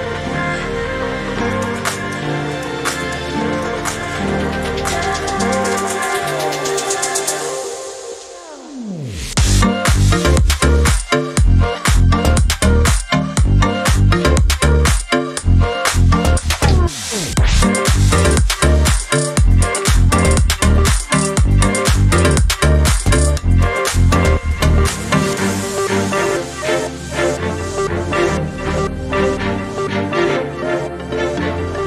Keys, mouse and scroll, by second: 0.9 click, 3.0 click, 4.1 click, 5.5 click, 6.6 click, 10.5 click, 11.6 click, 12.8 shift+click, 14.4 ctrl+g, 16.4 ctrl+d, 17.4 click, 18.4-22.0 drag, 22.8 ctrl+shift+g, 23.7 ctrl+shift+click, 24.3 ctrl+click, 24.9 ctrl+right click, 27.4 click, 28.7 click, 29.2 click, 30.5 Delete, 31.6 ctrl+scroll up 2.